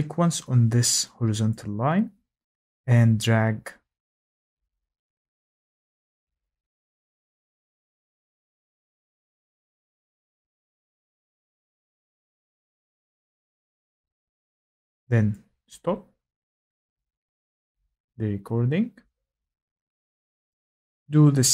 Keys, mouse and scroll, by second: 0.2-0.8 scroll, 14.3 click, 15.7 click, 20.5 click.